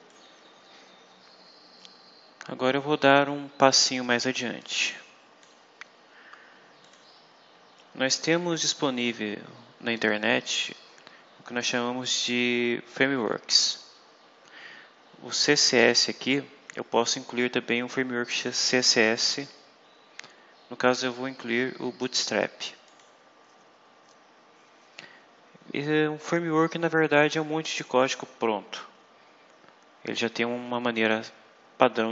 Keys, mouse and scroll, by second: 0.0 click, 4.5 click, 6.7 click, 10.7 scroll down 2, 19.2 click, 22.8 click.